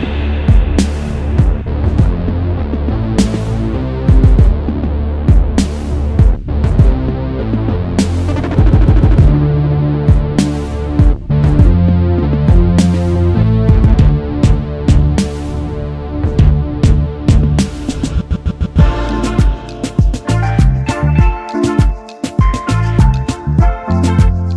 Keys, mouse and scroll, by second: 1.0 ctrl+alt+3, 2.4 double click, 2.5 space, 2.9-3.3 alt+scroll down 1, 3.5 double click, 5.2 alt+scroll down 1, 5.8 double click, 6.1 space, 7.7 alt+scroll down 1, 9.7 double click, 10.0 space, 12.0 alt+scroll up 1, 13.9 alt+scroll down 1, 14.7 space, 16.1 alt+shift+click, 17.4 ctrl+z, 18.6 ctrl+shift+o, 21.3 typing, 22.4 typing, 23.0 double click, 23.9 alt+shift+click.